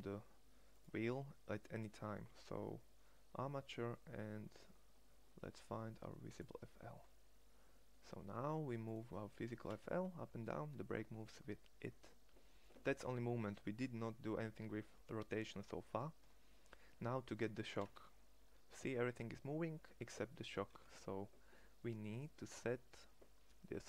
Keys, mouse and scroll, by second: 9.4 g, 15.7-17.7 middle drag, 17.7 g.